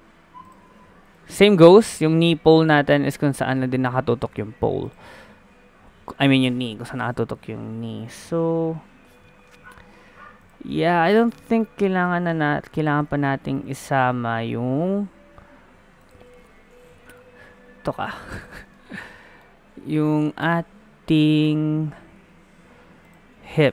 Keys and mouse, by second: 0.7 ctrl+z, 1.4 g, 6.7 KP_3, 8.3 g, 10.7-12.1 middle drag, 12.1-14.3 drag, 13.1 ctrl+z, 14.3 g, 16.5 KP_3, 17.5 g, 18.7 click, 19.7 KP_1, 21.1 g.